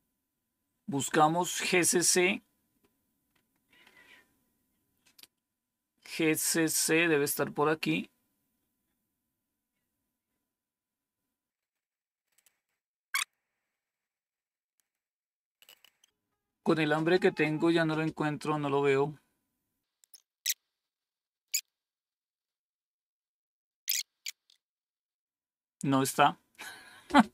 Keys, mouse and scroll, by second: 2.0-4.7 scroll up 1, 4.7-7.1 scroll up 1, 7.1-12.3 scroll up 1, 12.3-13.2 scroll up 1, 13.2-14.5 scroll down 1, 14.5-14.9 scroll down 2, 20.0-23.4 scroll up 2, 23.4-24.0 scroll up 1, 24.0-24.5 scroll up 1, 24.5-24.9 scroll down 3.